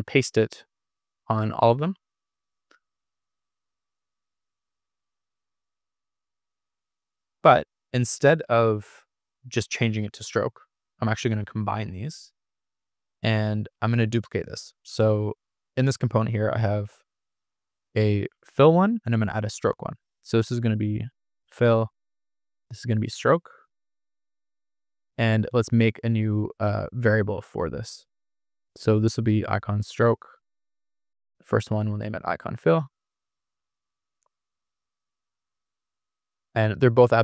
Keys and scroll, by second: 11.0 super+=, 18.4 super+d, 22.7-25.6 typing, 30.8-33.0 typing, 34.4-35.5 typing.